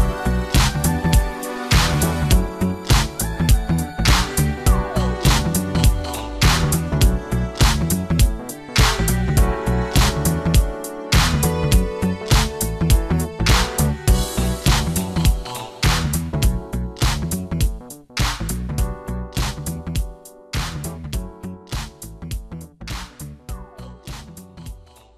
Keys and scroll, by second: 21.1 ctrl+space, 22.9 space.